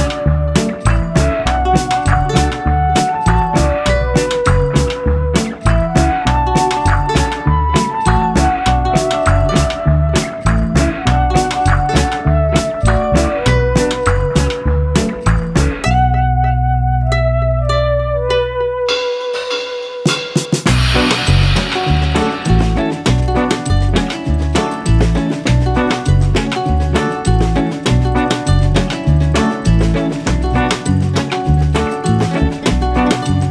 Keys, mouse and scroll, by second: 0.6-1.1 scroll up 2, 1.1-3.1 middle drag, 3.2-5.2 right drag, 6.2 scroll up 1, 6.4-8.4 middle drag, 8.8 scroll down 1, 9.0 middle click, 9.6 Tab, 9.8-11.0 middle drag, 11.0 click, 13.3 scroll down 1, 13.6 middle click, 14.5 scroll up 1, 14.8-16.4 middle drag, 16.4 s, 18.0-20.0 middle drag, 20.0 click, 20.4-21.2 scroll down 1, 21.2-22.6 drag, 22.6-23.0 scroll down 1, 23.0 s, 24.4 middle click, 25.0 s, 26.9-28.4 middle drag, 28.4 click, 28.8-31.0 middle drag, 31.0 s, 32.4 middle click, 33.3 click.